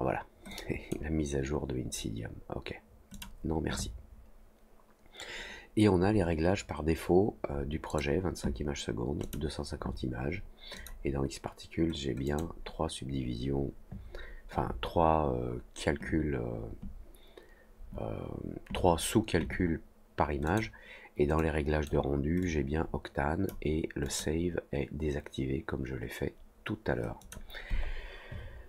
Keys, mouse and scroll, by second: 0.4-0.8 drag, 3.1 click, 7.8 click, 9.2 click, 10.7 click, 12.2 click, 20.4 click, 21.3 click, 22.3-23.4 drag, 24.0 click, 27.1 click.